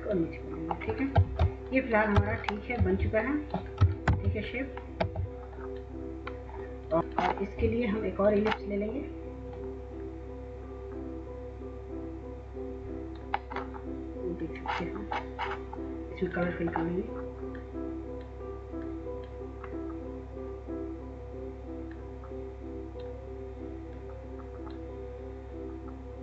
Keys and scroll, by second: 0.9-3.9 w, 3.9 ctrl+-, 4.7 w.